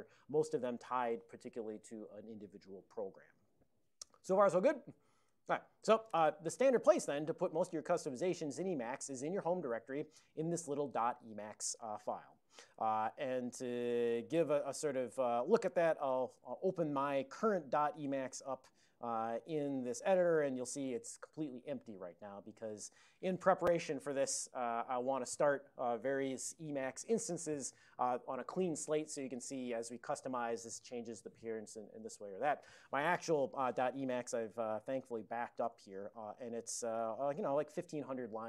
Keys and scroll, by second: 8.2 ctrl+n, 8.4 ctrl+n, 8.6 ctrl+n, 12.5 ctrl+x, 12.7 d, 14.1 ctrl+g, 16.1 ctrl+x, 16.4 ctrl+f, 17.7-20.1 typing, 20.2 Return.